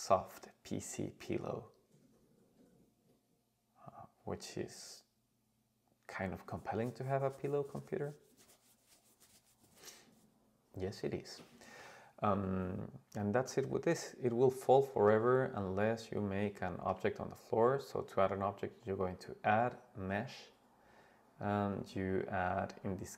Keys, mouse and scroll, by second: 12.7-13.2 scroll down 1, 13.2-13.6 middle drag, 14.1-15.0 scroll down 3, 15.0 click, 16.1 click, 16.7 shift+a, 19.0-23.1 drag.